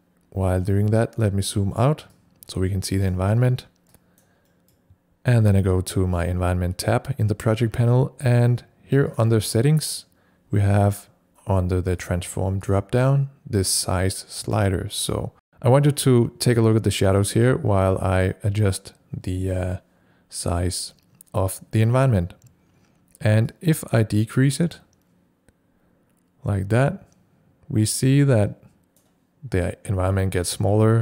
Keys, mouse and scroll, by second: 0.5 click, 0.5 scroll up 1, 2.6 click, 3.4 scroll down 1, 3.9 click, 4.4 middle click, 6.1 click, 9.1 click, 11.9 click, 23.6-31.0 drag.